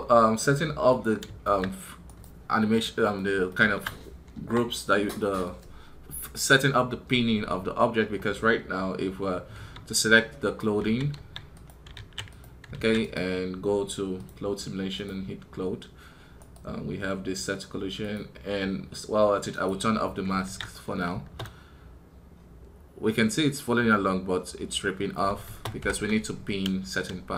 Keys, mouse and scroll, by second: 1.9 right click, 3.3-12.9 shift+middle drag, 12.9 right click, 16.2 right click.